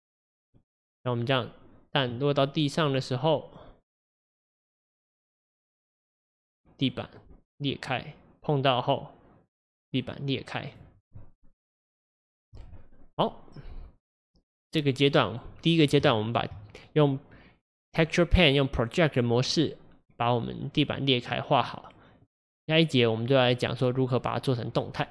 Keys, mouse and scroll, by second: 0.5 click, 0.9-4.0 middle drag, 4.9 drag, 5.6 middle click, 5.9-7.2 scroll down 1, 9.6-10.2 drag, 15.0-15.6 middle drag, 15.6-16.1 scroll up 1, 16.1-25.1 shift+middle drag.